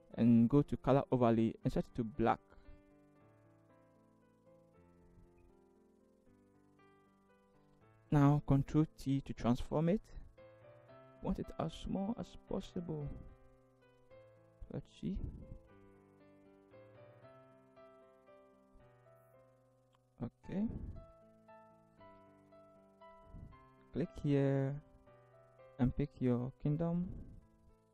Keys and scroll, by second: 8.0 ctrl+t, 13.9 alt+shift+Return, 14.5 alt+shift+v, 21.0 Up, 21.1 Up, 21.3 Up, 21.5 Up, 22.5 t.